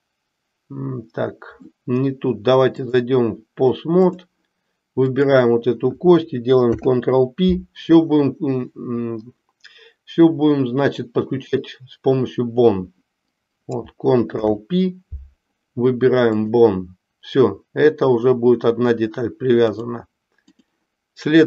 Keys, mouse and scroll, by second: 2.9-4.2 drag, 5.0 click, 6.6 ctrl+p, 14.2 ctrl+p, 19.7 click.